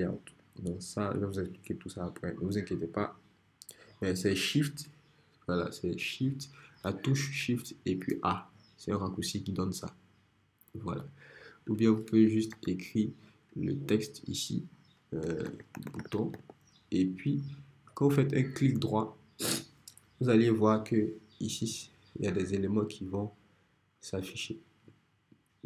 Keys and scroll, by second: 12.5 t, 15.2-16.9 typing.